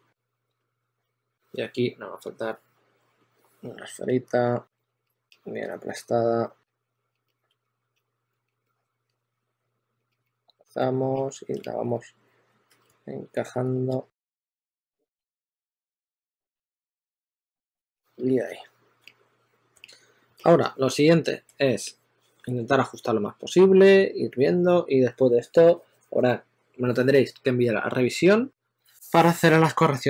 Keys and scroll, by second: 0.7 s, 4.8 w, 6.2-8.0 typing, 10.5-14.2 typing, 17.7 super+a, 18.3-19.3 typing.